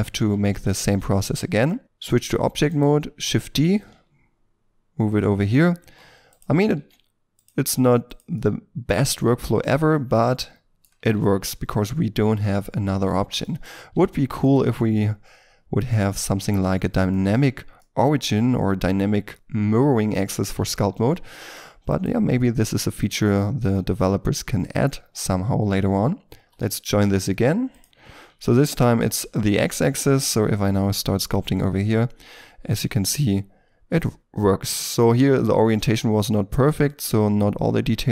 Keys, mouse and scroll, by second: 0.3-0.6 scroll down 1, 0.6 Tab, 2.1-2.6 scroll down 1, 2.7 right click, 3.2 shift+d, 5.1 ctrl+click, 5.4-5.8 scroll up 1, 5.8 r, 6.6 r, 6.7 r, 7.6 r, 8.4 middle click, 9.2 g, 9.9 middle click, 11.0 r, 11.1 r, 12.1 middle click, 13.9 r, 14.7 middle click, 16.4 r, 17.8 shift+middle click, 21.0 middle click, 21.9 right click, 23.0 shift+right click, 26.4 ctrl+j, 28.0 middle click, 29.5 double click, 30.0 middle click, 31.0 double click, 34.2 middle click.